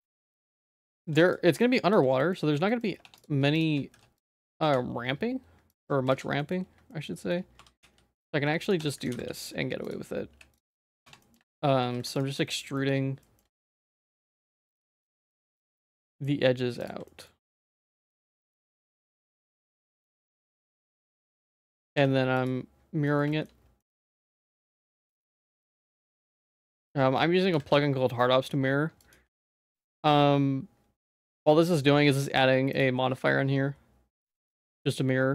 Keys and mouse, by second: 0.0 click, 1.0 ctrl+s, 1.6 shift+middle click, 1.9 z, 2.2 middle click, 2.7 middle click, 3.0 Tab, 3.5 shift+click, 3.9 h, 4.3 Tab, 4.6 z, 6.1 z, 6.3 middle click, 6.9 shift+middle click, 7.2 shift+middle click, 7.6 e, 8.8 Tab, 9.2 alt+x, 9.8 click, 10.6 h, 11.0 Tab, 11.2 middle click, 11.4 shift+middle click, 11.8 2, 12.4 middle click, 13.2 middle click, 13.5 shift+middle click, 13.8 middle click, 14.3 ctrl+s, 14.5 shift+middle click, 15.5 middle click, 15.9 shift+middle click, 16.1 middle click, 16.8 ctrl+click, 17.0 middle click, 17.7 shift+middle click, 17.9 shift+e, 19.3 shift+middle click, 19.7 e, 21.4 Tab, 21.5 middle click, 21.9 alt+x, 22.4 click, 23.0 middle click, 23.3 shift+middle click, 23.8 middle click, 24.1 shift+middle click, 24.7 g, 25.2 middle click, 25.8 g, 26.8 middle click, 27.5 alt+x, 29.5 ctrl+s, 29.9 shift+middle click, 32.7 click.